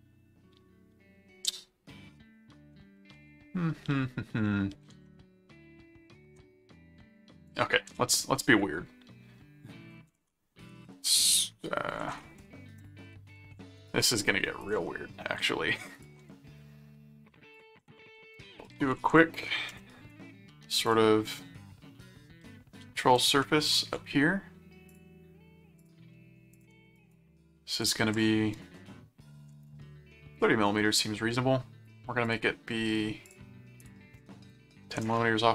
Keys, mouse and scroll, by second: 5.3 ctrl+Tab, 7.5 click, 7.9 s, 9.5-14.4 typing, 12.1 ctrl+a, 12.8 click, 14.6 ctrl+click, 14.8 ctrl+Tab, 15.9 ctrl+click, 17.5 click, 17.6-19.6 typing, 19.7 Return, 20.9 click, 23.4 ctrl+5, 24.9 click, 25.8 click, 26.5 click, 27.0 right click, 27.8 click, 32.3 click, 33.2 click.